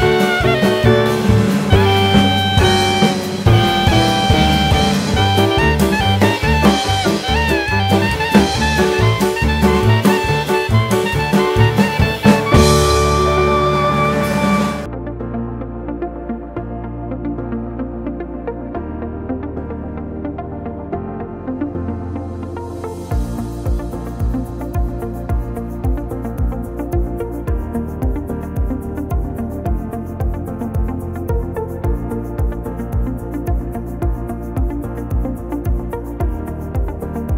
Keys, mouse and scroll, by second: 0.0 scroll down 1, 0.1-0.5 ctrl+scroll up 2, 0.5 ctrl+z, 0.7 ctrl+z, 0.9 ctrl+z, 1.3 ctrl+z, 1.5 ctrl+z, 1.8 ctrl+z, 2.2 ctrl+z, 2.7 middle click, 3.2 ctrl+z, 3.8-4.6 scroll up 3, 4.6 middle click, 5.5 alt+z, 7.0 s, 12.5 e, 14.1-14.6 scroll down 4, 14.3 middle click, 14.9 Tab, 15.1 click, 15.3 scroll up 2, 15.6 alt+z, 16.0 middle click, 16.9 click, 17.2 middle click, 18.1 middle click, 18.9 click, 20.5 middle click, 20.9-21.2 scroll down 2, 21.1 click, 21.4 middle click, 24.3 click, 24.7 shift+middle click, 25.1-25.8 scroll up 2, 27.1 scroll up 1, 27.5 click, 28.4 scroll up 1, 28.5 click, 30.0 scroll down 4, 30.3 shift+click, 30.8 click, 32.7 ctrl+s.